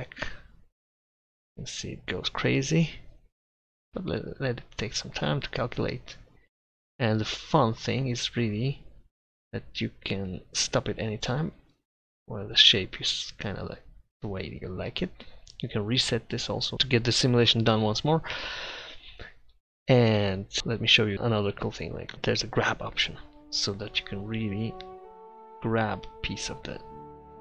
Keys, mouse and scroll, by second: 2.9-5.7 middle drag, 10.6-11.8 drag, 11.8-14.9 middle drag, 22.4-24.1 drag, 23.4-25.3 middle drag, 23.4 right click.